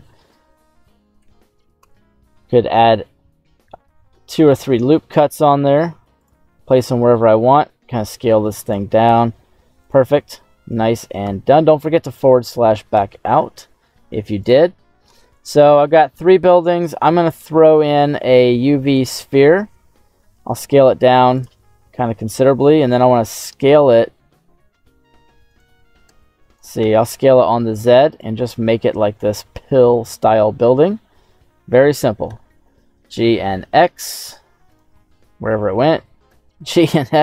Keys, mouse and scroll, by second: 0.3 middle click, 1.1 Tab, 1.7 Tab, 2.4 ctrl+r, 4.9-5.4 scroll down 2, 6.1 click, 6.4-6.9 scroll down 2, 6.9 s, 8.6 click, 9.0 Tab, 9.3-9.7 scroll down 2, 9.7 right click, 10.5 middle click, 11.2 /, 12.2 right click, 12.9 g, 13.2 x, 14.3 click, 14.6-17.5 scroll down 6, 15.3 middle click, 17.9 shift+a, 20.1 s, 21.3 click, 22.8 s, 23.8 x, 25.4 right click, 26.0 z, 26.7 s, 27.0 z, 28.1 click, 28.6 s, 30.0 click, 32.2 g, 32.6 x, 34.6 right click, 34.9-35.3 scroll down 3, 35.5 shift+middle click, 36.2 g, 36.6 x.